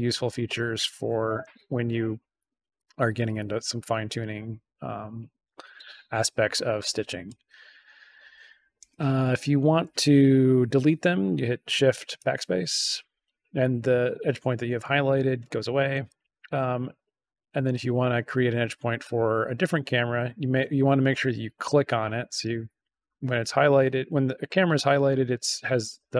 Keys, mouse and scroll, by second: 0.2 click, 2.7-5.0 drag, 7.7 click, 8.7 BackSpace, 12.1 shift+BackSpace, 16.0 click, 21.2 click, 22.3 click.